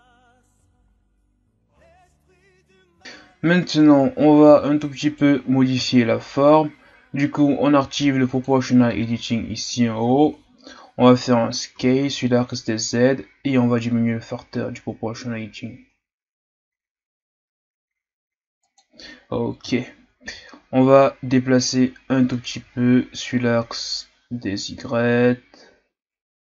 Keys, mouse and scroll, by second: 0.3 right click, 0.3 middle click, 0.6 click, 1.0 KP_1, 1.1 Tab, 2.6 Tab, 3.6 Tab, 5.0 alt+right click, 5.8-8.3 scroll down 5, 8.3-10.3 drag, 10.3-11.7 shift+scroll up 1, 11.7 s, 19.8-20.9 shift+scroll up 1, 21.0-24.2 drag.